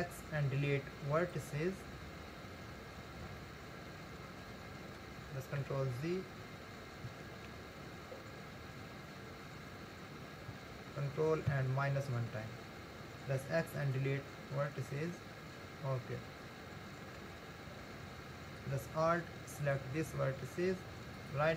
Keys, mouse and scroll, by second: 3.4-6.8 middle drag, 6.8 ctrl+z, 7.5 ctrl+z, 11.5 ctrl+KP_Subtract, 13.4 x, 15.2-17.4 middle drag, 17.4 scroll up 2, 19.6 alt+click, 21.2-21.5 right drag.